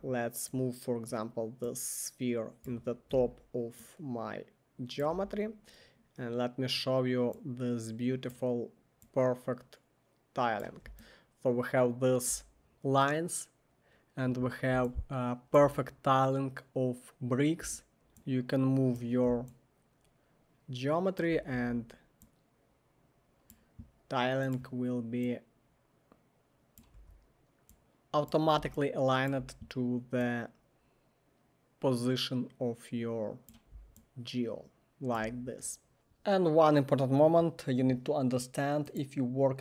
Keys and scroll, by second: 3.1 alt+r, 5.1 w, 17.7-18.4 typing, 21.5 e, 26.9 w.